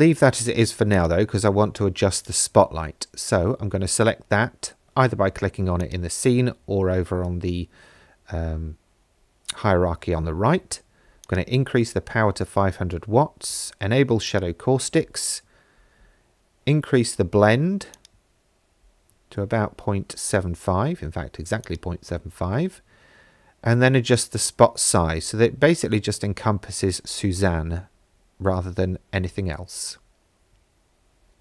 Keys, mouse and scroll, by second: 1.0 click, 2.2 click, 5.8-7.7 drag, 7.2 KP_0, 11.2 click, 14.3-17.5 drag, 17.9-19.7 drag, 21.7-31.4 drag.